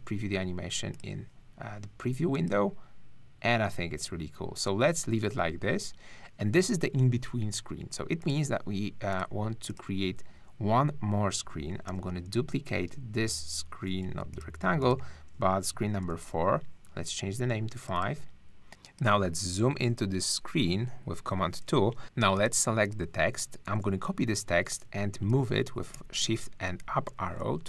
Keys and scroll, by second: 11.9 super+d, 14.0 super+z, 16.0 super+d, 19.8 super+1, 20.7 super+2, 23.5 super+c, 25.3 shift+Up.